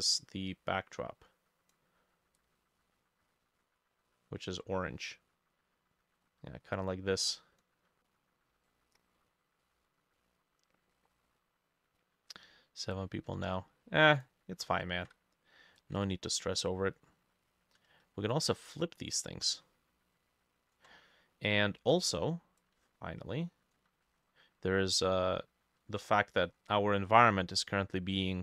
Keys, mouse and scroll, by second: 8.1 middle click, 8.7 middle click, 9.7 middle click, 10.2 middle click, 10.9 middle click, 13.3-15.3 ctrl+middle drag, 15.3 ctrl+z, 16.0-19.7 ctrl+drag, 16.0-18.8 ctrl+middle drag, 19.7-21.4 ctrl+middle drag, 21.1 scroll down 1, 21.1 ctrl+z, 22.0-22.6 scroll up 1, 22.8-24.1 ctrl+middle drag, 24.1 scroll up 1, 25.1 ctrl+middle click, 26.5 middle click, 26.6 scroll down 2, 27.1 middle click, 27.7-28.4 scroll up 12.